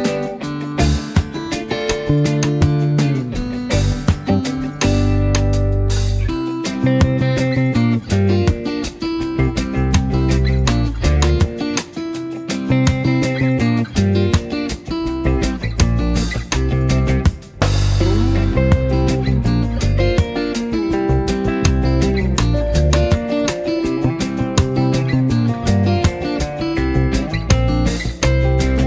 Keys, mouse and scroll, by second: 9.1 z, 9.4 click, 9.5 space, 9.7 click, 10.0 v, 10.3 click, 11.0 Up, 11.7 click, 13.8 z, 14.0 click, 14.3 space, 15.3 v, 15.4-16.0 drag, 23.8 space, 24.1-26.8 drag, 26.9 z, 27.2 click, 27.8 v, 28.6-28.8 alt+drag.